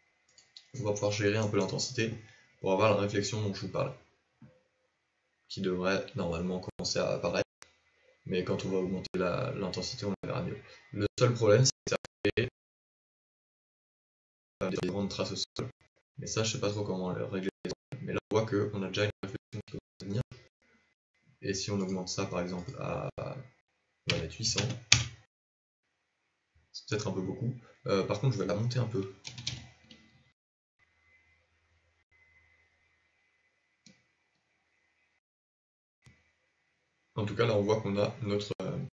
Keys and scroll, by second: 28.9 g.